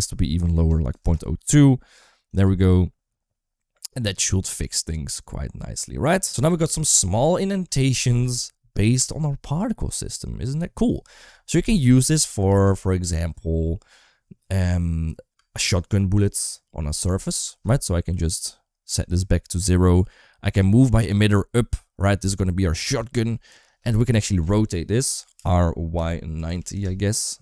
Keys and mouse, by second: 2.2 click, 2.3 space, 12.4 space, 15.2 space, 18.9 shift+middle click, 19.2 middle click, 20.8 g, 25.2 r.